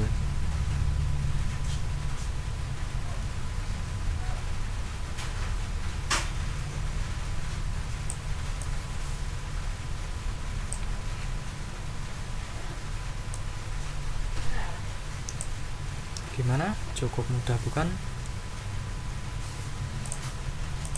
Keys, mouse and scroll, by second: 3.4-8.2 drag, 8.6-10.9 drag, 13.3-15.6 drag, 20.0 click, 20.8 click.